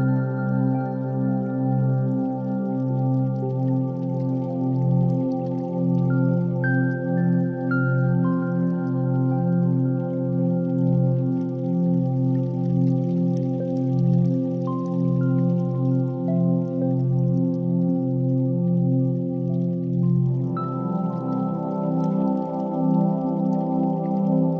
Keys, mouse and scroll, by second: 0.6 middle click, 1.7 click, 1.9 x, 2.8-4.3 middle drag, 5.2 Tab, 6.2 q, 8.6 click, 9.9-11.9 middle drag, 12.2 click, 12.8 KP_1, 13.1 shift+a, 15.9 ctrl+3, 16.4-17.6 right drag, 18.1 s, 20.6 click, 21.6 KP_3, 22.0 g, 22.2 y.